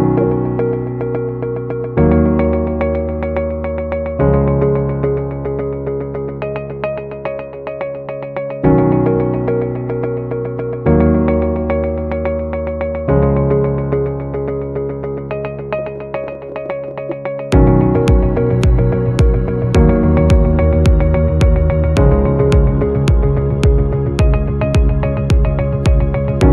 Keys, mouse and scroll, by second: 0.0-0.6 typing, 2.5 alt+scroll down 1, 3.9-4.9 alt+scroll, 9.2 alt+scroll up 1, 9.6 double click, 10.2-10.8 BackSpace, 12.1-17.4 typing, 18.7 double click, 19.5 space, 20.1 BackSpace, 20.3 BackSpace, 20.7 space, 22.7 alt+scroll down 1, 26.0 alt+scroll up 1.